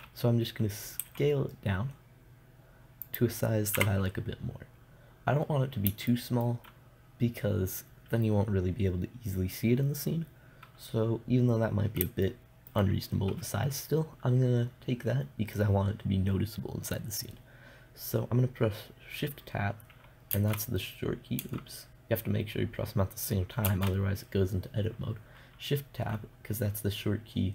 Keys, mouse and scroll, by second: 1.5 s, 3.6 click, 4.3 KP_0, 4.5 click, 4.9 click, 5.9-9.7 middle drag, 20.8 Tab, 21.9 Tab, 24.1 shift+Tab.